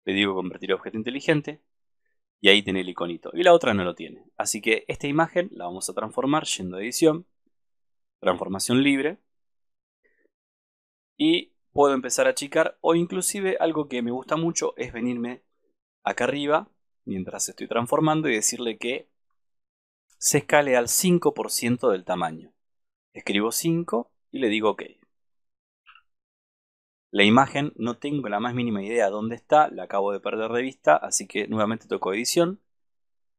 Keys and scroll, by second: 15.1 super+=, 26.2 super+-.